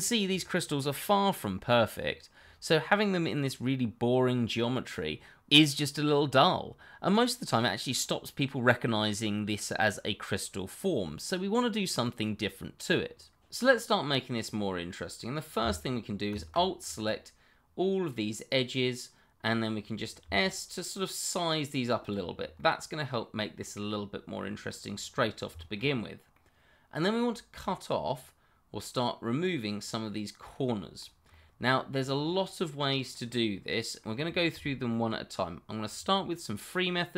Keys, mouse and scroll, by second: 13.8-15.6 scroll up 1, 16.3 alt+click, 16.9 middle click, 22.0 click, 22.3 scroll down 1, 22.6 middle click, 25.1-25.5 scroll down 1, 25.5 shift+middle click, 25.8-26.3 scroll up 1, 26.3 middle click.